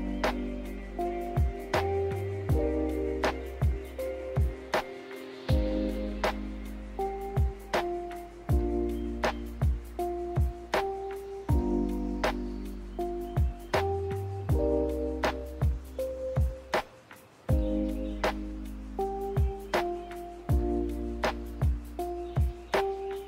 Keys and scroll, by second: 5.7 a.